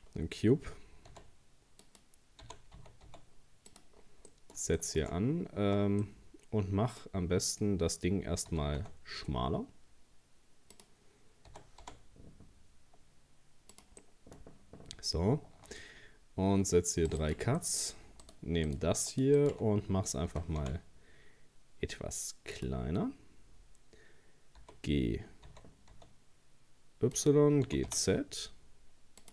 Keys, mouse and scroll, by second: 0.1-1.1 scroll down 2, 1.1 s, 2.4 g, 4.0 scroll up 1, 4.3 middle click, 5.1-5.6 shift+scroll up 1, 5.6 Tab, 6.0-8.5 middle drag, 8.5 s, 11.5 s, 14.0-15.7 middle drag, 15.7 ctrl+r, 17.6 middle click, 18.2 right click, 18.7 shift+right click, 19.1 shift+right click, 19.4 shift+right click, 20.3 s, 24.6 g, 27.7 g.